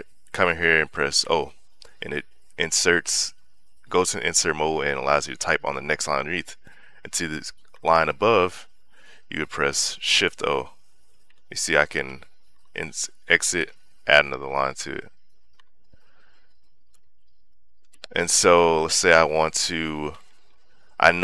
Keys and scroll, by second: 1.6 o, 8.1 Escape, 10.4 shift+o, 11.6 shift+o, 11.8 BackSpace, 12.3 Escape, 13.9 shift+o, 14.4 Escape, 15.3 shift+o, 15.4 Escape, 16.1 j, 16.7 k, 18.8 l.